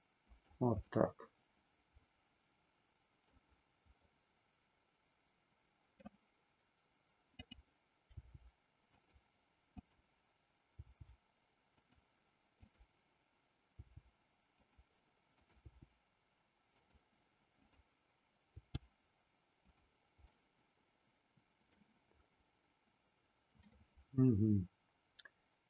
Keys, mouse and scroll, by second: 0.3 click, 1.1-3.4 middle drag, 4.2-6.2 middle drag, 8.2 g, 9.7 click, 10.8 g, 11.8 click, 12.7 click, 13.7 g, 14.7 click, 16.1 g, 17.4 click, 18.6 g, 19.7 click, 20.6-21.8 middle drag.